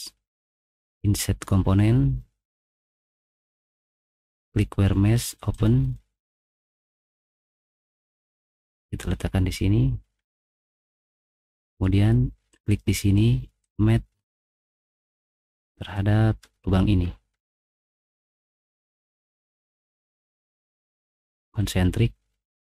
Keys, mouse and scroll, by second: 1.0 click, 3.1 middle click, 4.5 click, 5.5 click, 8.2 click, 10.1 middle click, 10.1-10.6 scroll down 4, 10.5 middle click, 11.2 middle click, 11.5 middle click, 12.5 click, 13.6 click, 14.7 click, 15.1 middle click, 15.3 middle click, 15.3 scroll up 1, 15.7 middle click, 16.6 scroll down 2, 16.9 middle click, 17.0 middle click, 17.4 middle click, 18.6 click.